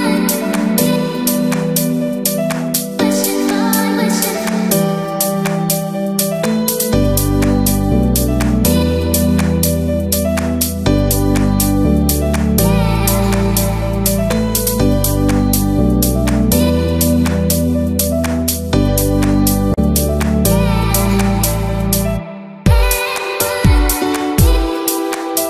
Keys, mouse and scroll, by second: 0.0-0.3 typing, 1.4 shift+middle click, 1.5-21.8 typing, 8.0 click, 8.9 shift+middle click, 9.2 click, 14.5 click, 15.6 shift+middle click, 19.8 Escape, 19.8 ctrl+z, 19.8 click, 21.5 middle click, 21.5-21.9 scroll down 5, 21.9 shift+middle click, 22.2 click.